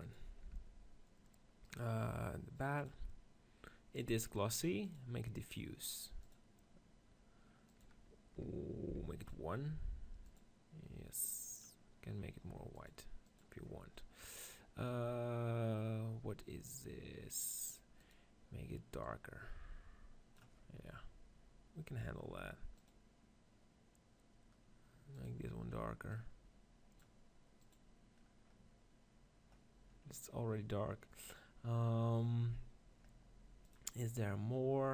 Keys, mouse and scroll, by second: 0.0-1.4 drag, 0.0 r, 0.4 Tab, 1.5-2.8 drag, 2.8 middle click, 3.5-13.6 drag, 14.2-15.8 right drag, 15.8-17.8 middle drag, 18.9 click, 22.7-29.4 drag, 29.7-32.8 middle drag, 33.5-34.9 drag.